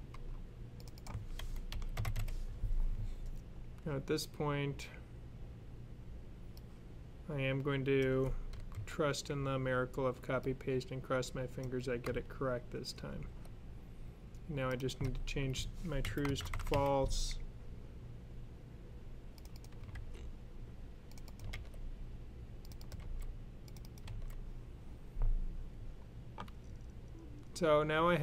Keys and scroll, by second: 1.2-2.5 typing, 8.6 super+c, 13.0 super+v, 15.9-16.6 typing, 19.8 super+c, 21.4 super+v, 22.9 super+v, 23.9 super+v.